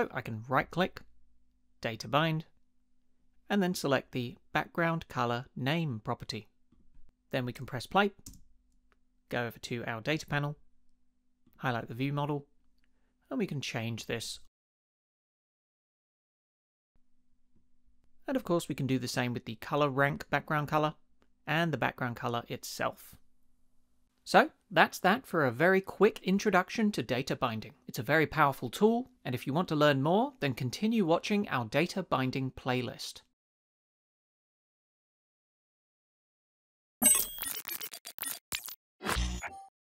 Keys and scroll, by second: 8.3 space.